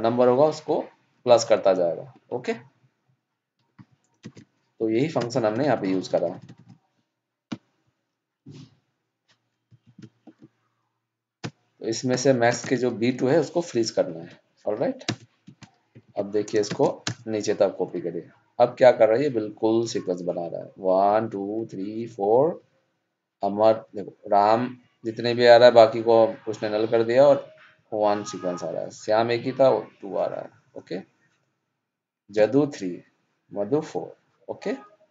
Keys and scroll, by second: 4.2 ctrl+shift+Down, 16.0 ctrl+c, 16.6 ctrl+shift+Down.